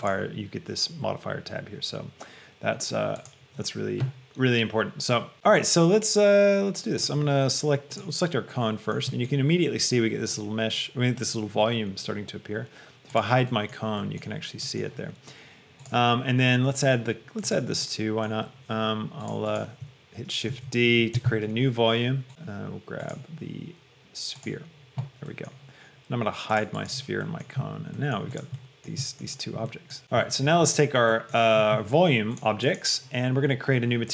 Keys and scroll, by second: 20.8 shift+d, 21.5 Escape.